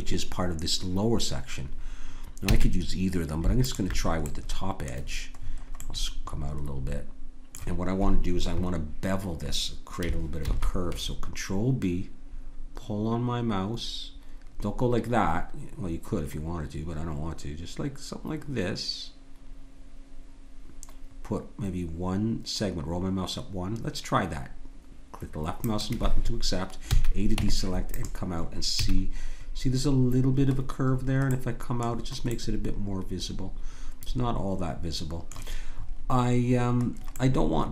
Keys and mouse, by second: 2.5 a, 3.6-5.0 drag, 5.1 click, 10.4 ctrl+b, 26.9 a, 27.3 Tab, 28.8 a, 36.4-37.7 middle drag.